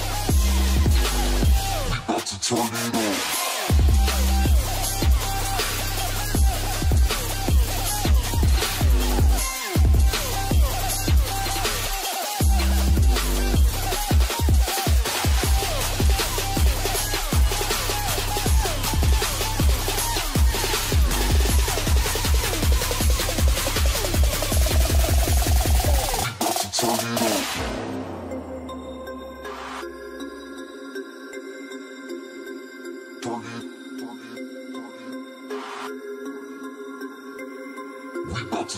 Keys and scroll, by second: 18.0 space, 21.5 |, 26.1 ctrl+space, 27.3 l, 38.0 alt+space.